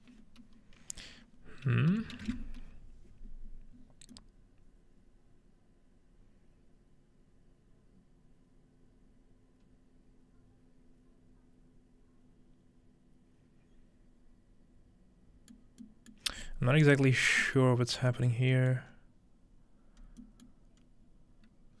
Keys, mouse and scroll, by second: 1.8-2.7 typing, 15.7 middle click, 16.2-17.0 middle drag, 16.7-17.4 scroll down 2, 17.4 scroll up 2, 17.8 scroll down 2, 18.9-20.2 scroll up 4, 20.8-21.8 scroll up 2.